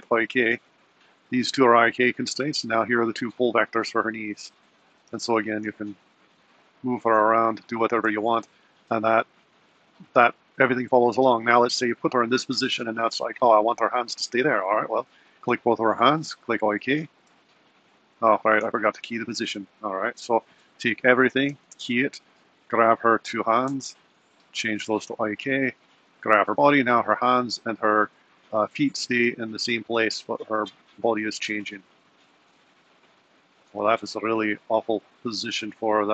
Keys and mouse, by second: 0.6 click, 2.3 click, 3.2 click, 4.3 click, 5.2 g, 8.1 g, 19.2 super+z, 19.8 super+z, 21.1 a, 21.5 i, 22.7 click, 24.7-25.9 drag, 26.2 click, 26.7 r, 31.7 g.